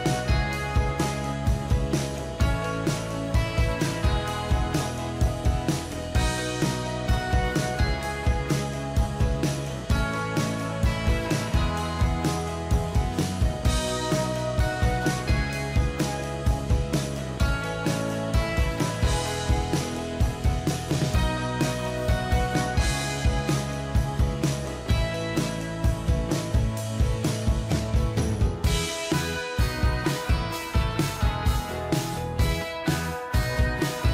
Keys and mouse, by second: 3.2 ctrl+d, 4.5 ctrl+t, 9.4 ctrl+click, 13.8 ctrl+d, 18.6 right click, 29.7 BackSpace, 30.1 Return.